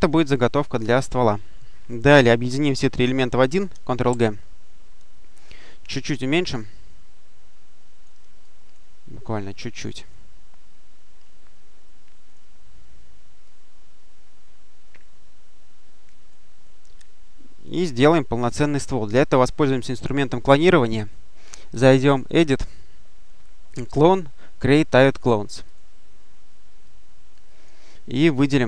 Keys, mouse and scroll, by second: 1.7-2.6 drag, 4.0 ctrl+g, 5.9-8.4 ctrl+drag, 8.8-9.5 scroll down 1, 9.7 click, 10.2-10.8 scroll down 1, 10.8-12.2 scroll down 1, 12.2 click, 13.3-16.6 drag, 16.9 ctrl+click, 18.0 ctrl+click, 22.1 click, 25.5 click, 26.7-28.0 drag.